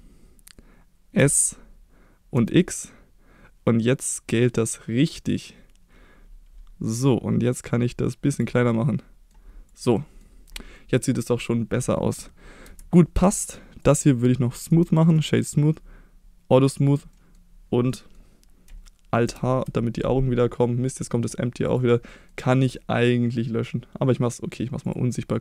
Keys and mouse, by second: 1.1 s, 2.3 x, 8.3 click, 8.7 middle click, 9.9 middle click, 10.8 middle click, 12.6 Tab, 13.2 middle click, 13.8 click, 14.5 right click, 16.5 click, 17.1 middle drag, 17.8 middle click, 19.3 alt+h, 21.6 click, 22.0-23.0 middle drag, 24.8 click.